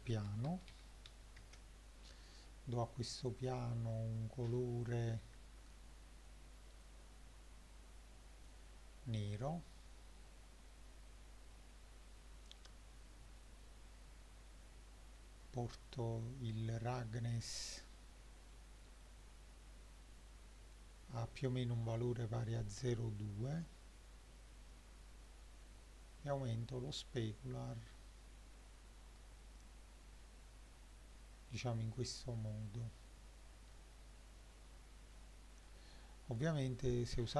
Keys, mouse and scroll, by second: 3.3 click, 10.4-12.9 scroll down 7, 13.4-15.9 drag, 16.5-17.6 middle drag, 17.9-18.3 scroll down 2, 18.5-19.1 middle drag, 23.2-25.4 drag, 26.4-28.1 shift+middle drag, 31.5-32.2 middle drag, 32.4-33.8 shift+middle drag, 34.2-34.5 scroll up 1, 34.8 scroll up 1, 35.1-35.7 middle drag.